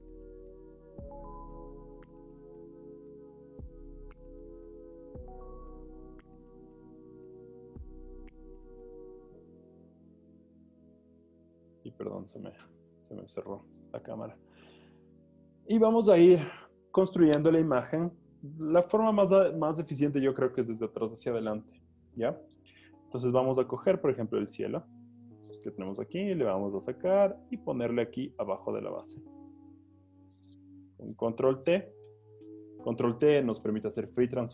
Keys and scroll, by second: 26.0 v, 31.1 super+t.